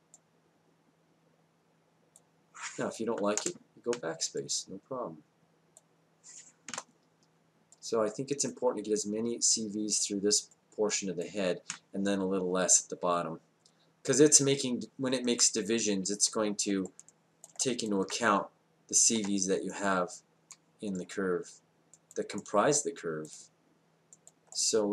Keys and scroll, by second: 3.4 BackSpace, 6.7 BackSpace, 19.2 w.